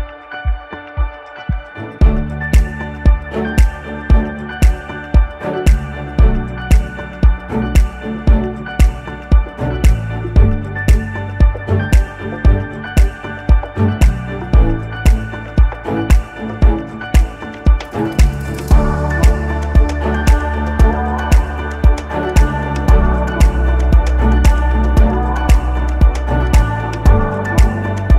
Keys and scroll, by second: 0.1 Return, 2.0 ctrl+alt+shift+e, 7.6 ctrl+z, 13.8 ctrl+alt+shift+e.